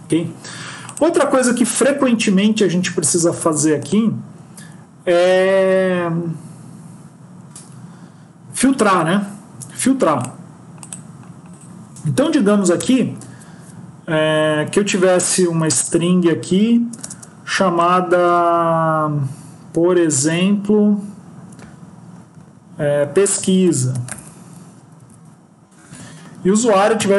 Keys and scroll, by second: 18.1 BackSpace.